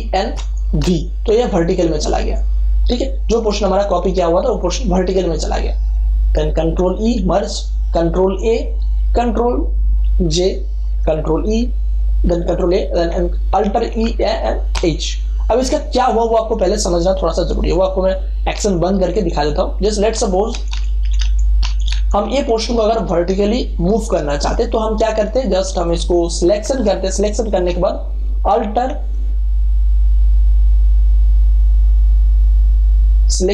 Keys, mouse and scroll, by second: 0.3 a, 0.7 v, 6.9 ctrl+e, 8.3 ctrl+a, 10.2 ctrl+j, 11.2 ctrl+a, 13.7 alt+e, 14.0-15.2 typing, 19.3 click, 20.5 ctrl+alt+z, 25.8 click, 26.6 ctrl+a.